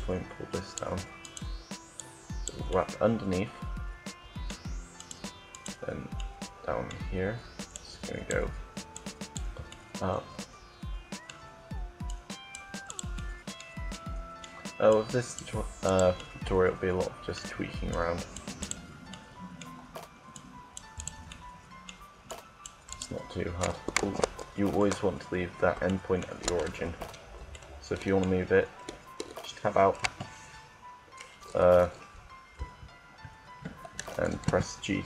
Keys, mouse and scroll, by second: 0.1 right click, 1.7 click, 1.7 right click, 2.4 middle click, 2.9 click, 3.7 middle click, 4.6-7.2 right drag, 7.2 middle click, 7.6-9.4 drag, 9.4 middle click, 10.2 click, 10.6-11.9 middle drag, 11.9 click, 12.1-13.4 right drag, 13.4-14.7 middle drag, 14.8-15.9 right drag, 15.9 middle click, 17.9-18.9 right drag, 19.1 right click, 20.1 middle click, 20.2-22.7 right drag, 24.0 ctrl+z, 24.9 middle click, 25.8 ctrl+z, 26.7 Tab, 27.4 Tab, 29.7 KP_7, 30.2 KP_7, 34.3 g.